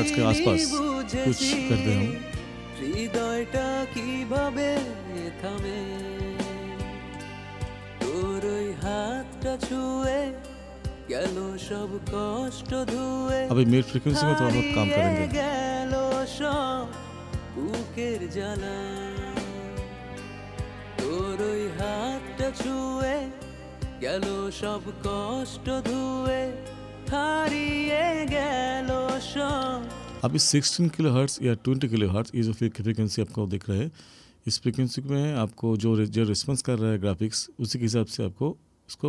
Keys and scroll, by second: 30.2 space.